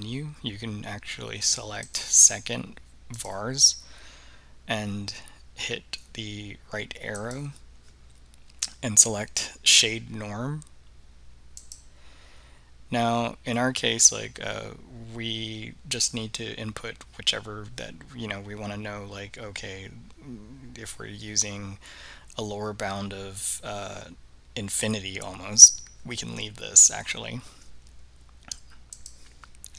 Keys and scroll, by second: 7.3 Right, 11.7 Return, 29.0 Return.